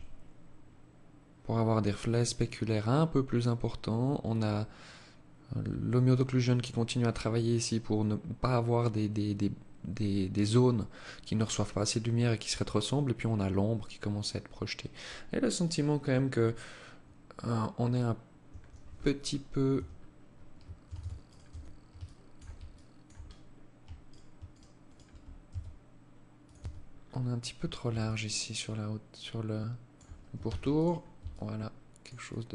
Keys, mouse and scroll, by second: 17.6 Escape, 18.1-18.6 scroll up 5, 18.9 Tab, 19.0 scroll up 3, 20.1 Tab, 20.4 right click, 20.6 Tab, 21.1 alt+shift+click, 21.9 alt+click, 22.4-22.8 scroll up 5, 23.2 alt+right click, 23.7 alt+shift+right click, 24.0 alt+right click, 24.6 s, 25.7 Tab, 26.1 scroll down 5, 26.8 scroll down 3, 27.2 alt+click, 29.6 ctrl+s, 30.4 alt+click, 31.4 alt+click.